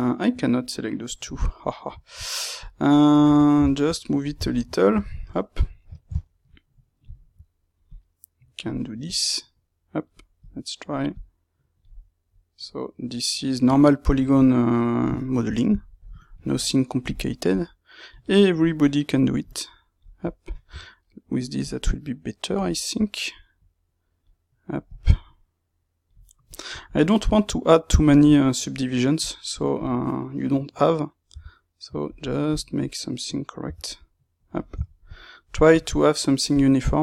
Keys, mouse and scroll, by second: 0.7-2.5 middle drag, 2.5 click, 2.9-7.9 middle drag, 3.2 Tab, 7.9-10.5 drag, 11.1 click, 11.9-13.6 middle drag, 13.6 click, 14.3 click, 15.1-17.5 shift+middle drag, 17.5 click, 18.1-19.3 middle drag, 19.3 click, 20.1 click, 20.7 Tab, 20.9 middle click, 21.5 click, 22.7 shift+middle click, 23.5 click, 26.2-27.4 middle drag, 27.4 click, 28.1 middle click, 29.1 click, 29.7 click, 31.2 g, 32.1-35.7 middle drag, 33.5 g, 35.7-36.8 drag.